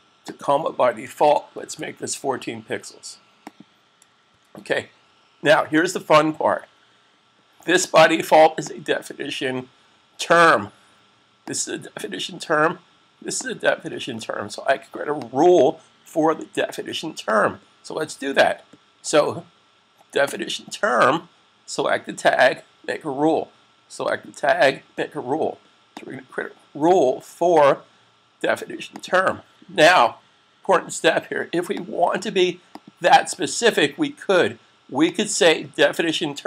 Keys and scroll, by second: 1.1-1.5 typing, 4.1 s.